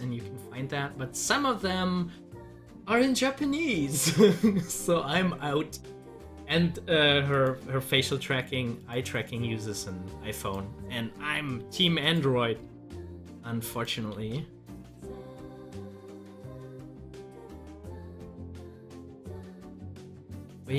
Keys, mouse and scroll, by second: 7.3 click, 12.4 Delete, 13.8 click, 13.9 Delete, 14.3 scroll up 1, 16.1 Delete, 16.6 click, 17.1 Delete, 18.4-20.7 drag.